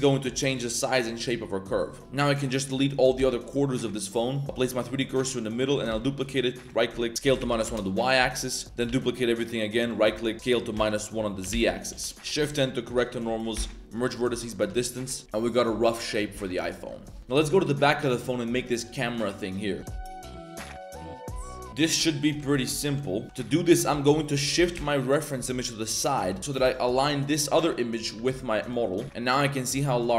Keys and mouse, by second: 2.0 b, 3.1 x, 4.3 right click, 4.4 shift+s, 4.4 a, 5.9 shift+d, 7.1 ctrl+z, 7.1 s, 8.1 a, 8.8 shift+d, 10.3 s, 12.1 shift+z, 12.3 shift+n, 13.5 m, 14.5 Tab, 14.8 shift+middle drag, 15.0 middle drag, 15.4-16.2 middle drag, 16.3-16.8 middle drag, 21.8 middle click, 22.3-24.5 typing, 23.2 Tab, 26.6 g, 28.6 click, 29.6 click, 30.0 click.